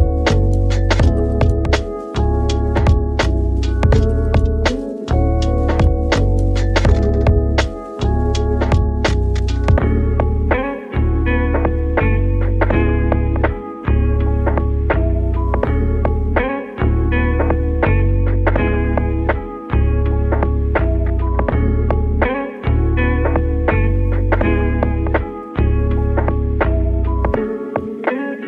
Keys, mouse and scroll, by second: 0.5 g, 0.9 click, 1.1 s, 1.6 click, 1.8 g, 2.5 click, 3.9 s, 5.6 click, 5.9 g, 6.8 click, 7.0 s, 7.5 g, 8.4 right click, 9.1-9.4 scroll up 2, 9.4-10.9 shift+middle drag, 10.8 ctrl+3, 12.2 click, 13.3-14.5 drag, 14.5-15.2 scroll down 2, 15.2-17.0 scroll down 3, 17.0 click, 18.4-19.7 drag, 21.6-22.1 scroll down 1, 22.1 middle click, 22.6-23.1 scroll up 1, 23.2-24.9 shift+middle drag, 24.9 click, 25.7 shift+a.